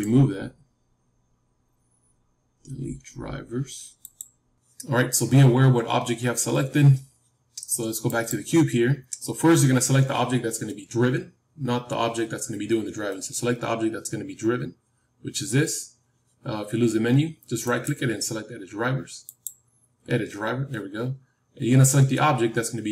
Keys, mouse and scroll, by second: 8.0-14.7 drag, 17.6-19.9 right drag.